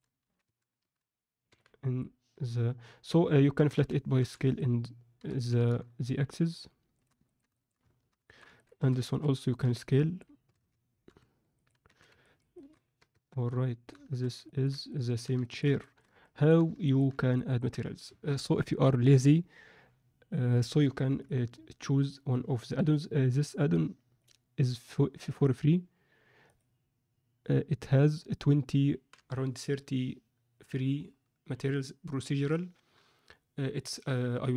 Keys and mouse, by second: 0.2 z, 0.4 a, 1.4 b, 3.5 s, 5.1 g, 7.2 ctrl+middle click, 7.5 alt+shift+middle click, 8.2 alt+shift+middle click, 8.5 ctrl+middle click, 8.8 a, 9.6 b, 10.4 s, 11.8 z, 12.2 ctrl+middle click, 12.5 ctrl+middle click, 13.1 Tab, 13.4-13.8 middle drag, 14.3 alt+a, 14.4 ctrl+alt+middle click, 14.8 alt+middle click, 15.4 shift+middle drag, 15.8 ctrl+alt+middle click, 16.2 middle click, 16.8 ctrl+middle click, 17.3 middle click, 22.7 n, 25.4-26.4 drag, 26.6-34.5 drag.